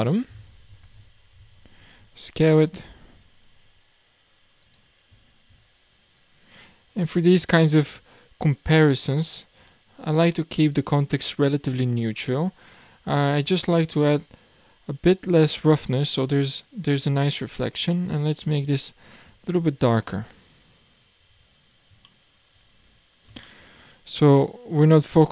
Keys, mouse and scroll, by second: 0.1-1.9 drag, 1.9 s, 3.6 s, 6.5 click, 7.7-9.7 drag, 12.3-12.7 scroll down 3, 14.2-17.0 drag, 19.1 scroll up 2, 19.7-20.1 scroll up 1, 20.1-20.8 middle drag, 20.8-21.3 scroll down 1, 21.3 alt+a, 21.6-22.0 scroll down 3, 22.1-22.7 shift+middle drag, 22.7 scroll up 5, 23.4-25.3 shift+middle drag.